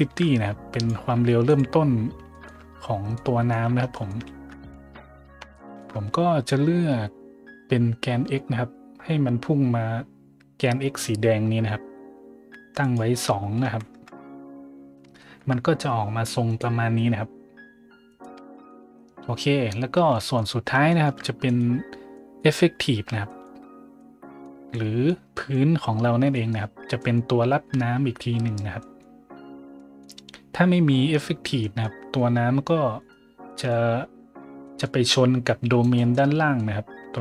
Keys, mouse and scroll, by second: 0.7 click, 1.4 click, 2.2 shift+middle drag, 2.7 middle click, 3.1-3.4 middle drag, 3.8 shift+middle drag, 4.5 `, 5.2 middle click, 5.5 shift+middle drag, 12.8 click, 13.6 KP_2, 13.9 KP_Enter, 14.8 middle click, 14.8-15.5 scroll, 15.1 shift+middle drag, 15.5 middle click, 16.4 right click, 18.0 right click, 19.3 middle click, 19.9 a, 20.0 middle drag, 20.8 shift+middle drag, 21.4 right click, 22.1 middle click, 23.2 shift+middle drag, 23.9-24.4 middle drag, 24.6-25.0 middle drag, 25.3 middle click, 25.9-27.1 scroll up 3, 28.7 scroll up 1, 29.7 scroll up 1, 30.2 scroll up 2, 31.5 middle drag, 31.9-32.3 middle drag, 32.9 right click, 33.4-34.1 middle drag, 34.6 middle click, 35.7 right click, 36.1 middle click.